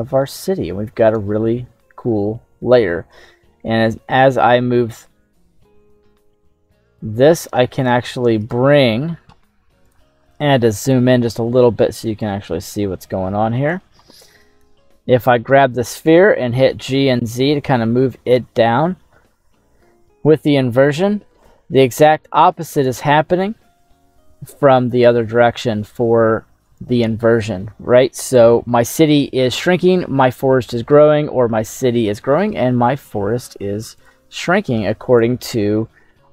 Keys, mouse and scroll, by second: 0.1 middle click, 1.0 right click, 1.5 middle click, 2.7 g, 3.2 z, 7.9 click, 8.5 right click, 12.2-13.7 drag, 16.5 g, 17.0 z, 22.8 click, 26.7 right click, 27.9 right click, 33.9 click, 35.2 g, 35.7 z.